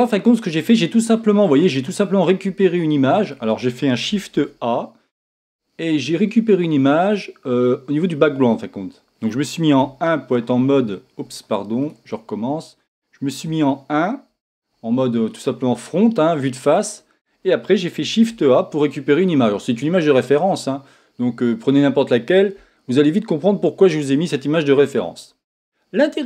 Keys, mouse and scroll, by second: 1.0 middle click, 3.4-4.3 scroll up 2, 4.3 shift+a, 12.2 click, 13.5 KP_1, 15.4 scroll down 1, 15.9-18.0 scroll up 1.